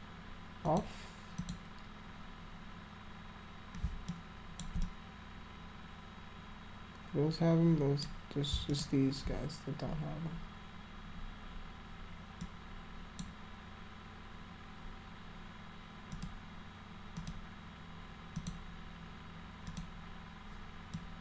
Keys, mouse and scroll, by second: 0.6 click, 1.3 click, 4.1 alt+click, 4.8-8.0 drag, 8.7 alt+click, 12.4 click, 16.1 click, 17.1 click, 18.4 click, 19.7 click, 20.9 click.